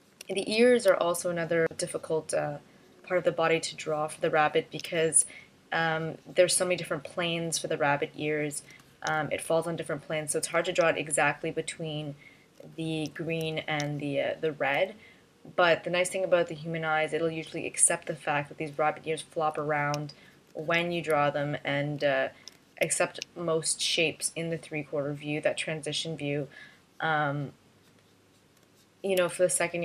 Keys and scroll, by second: 0.4 space, 1.1 space, 5.3 space, 9.6 space, 11.4 space, 13.6 space, 14.3 space, 21.3 space, 23.0 space, 29.1 space.